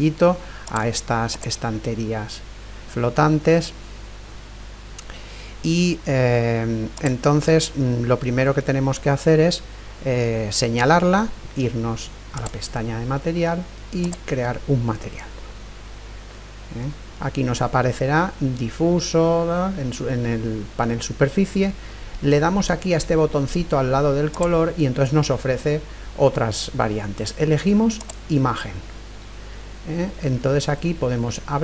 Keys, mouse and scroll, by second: 0.6-3.2 right drag, 1.8-3.6 middle drag, 5.1-6.6 scroll up 1, 6.6-7.0 scroll up 1, 7.0-8.8 right drag, 8.3-10.1 middle drag, 12.4-16.1 drag, 16.2-18.3 middle drag, 24.3-26.2 drag.